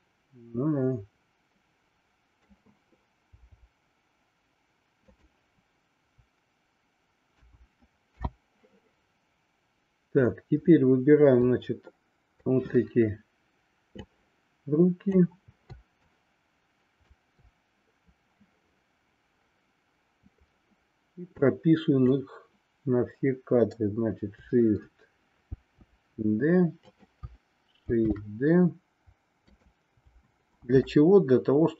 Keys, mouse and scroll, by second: 3.3 r, 7.3 a, 8.3 i, 11.4-12.5 drag, 14.0-15.3 drag, 15.9-17.1 shift+drag, 21.3 click, 25.5 shift+d.